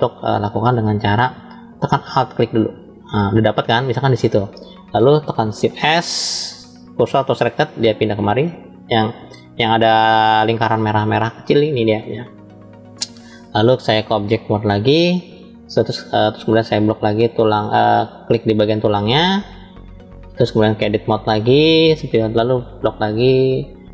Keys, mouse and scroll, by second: 0.7 scroll up 1, 2.3 alt+click, 5.5 shift+s, 13.9-14.7 drag, 16.3-18.2 drag, 18.9 click, 20.8-21.6 drag, 22.4-23.7 drag.